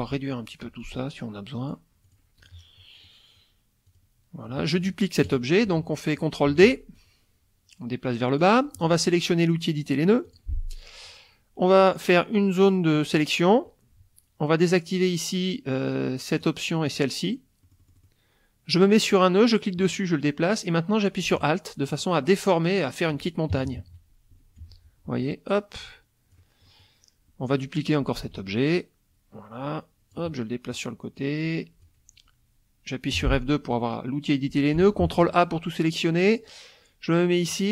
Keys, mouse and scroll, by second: 0.6-1.9 drag, 2.0 click, 2.4 click, 3.9 click, 4.5 middle click, 5.3 KP_Subtract, 5.9 middle click, 6.5 ctrl+d, 6.9-8.6 ctrl+drag, 10.3 click, 11.8-13.3 drag, 16.3 click, 16.9 click, 17.6 middle click, 19.1-23.3 drag, 23.5 alt+KP_Subtract, 24.6 F1, 25.6-26.5 drag, 26.7 click, 28.2 ctrl+d, 28.7-30.9 ctrl+drag, 31.2 click, 33.1 F2, 35.0 ctrl+a, 37.5-37.7 drag.